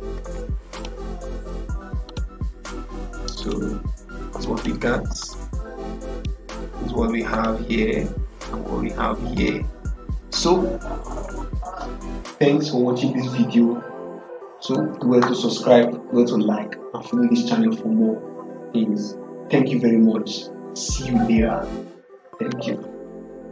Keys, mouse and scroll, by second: 0.6 click, 0.7 click, 3.3 click, 6.0 click.